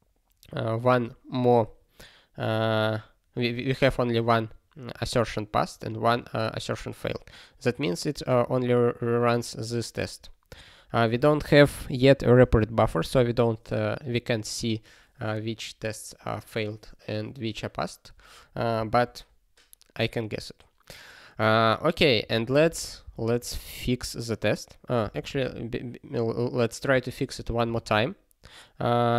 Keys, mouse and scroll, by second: 8.4 click, 9.6 click, 10.5 click, 22.2 ctrl+p, 22.4 ctrl+e, 22.6 ctrl+b, 23.0 ctrl+b, 24.0 BackSpace, 25.0 b, 25.4 ctrl+s, 26.9 d, 27.3 ctrl+e, 27.9 ctrl+e.